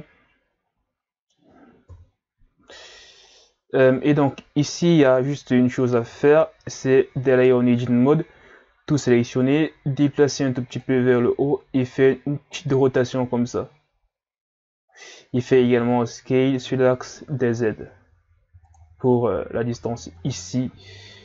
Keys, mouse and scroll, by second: 1.9 KP_3, 3.6-4.1 scroll down 2, 4.4-4.9 scroll up 1, 4.9 right click, 5.5-6.0 scroll up 2, 6.0 Tab, 6.5 a, 6.9 a, 9.0 click, 11.4 r, 15.5 s.